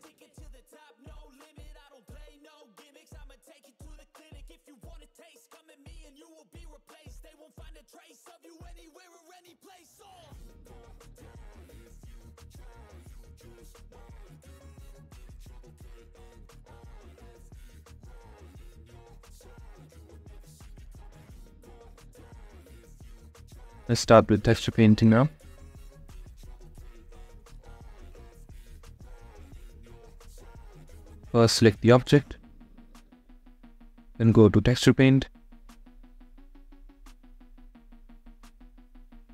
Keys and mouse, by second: 4.3 shift+click, 4.8 middle click, 5.3 shift+click, 5.7 shift+middle click, 6.1 middle click, 21.1-22.3 drag, 28.1 click, 32.0 click, 35.5 click.